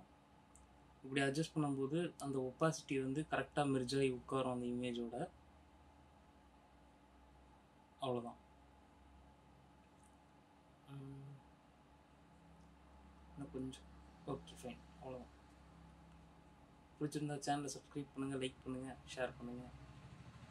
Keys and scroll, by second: 17.4 F7, 19.4 ctrl+-.